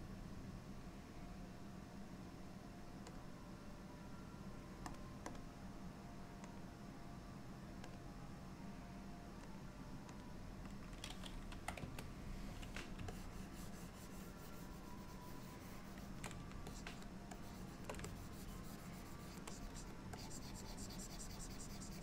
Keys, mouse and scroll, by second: 13.2 ctrl+click, 16.8 shift+click, 17.5 shift+click, 18.1 ctrl+click, 19.6 click, 19.8 click, 20.2 ctrl+click.